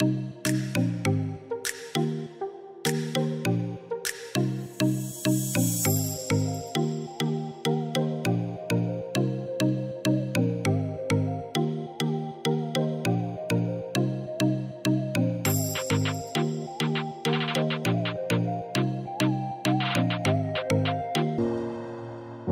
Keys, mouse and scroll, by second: 1.0 Tab, 1.6 click, 3.5 click, 5.6 Delete, 6.5 click, 15.0-17.3 middle drag, 17.3 shift+d.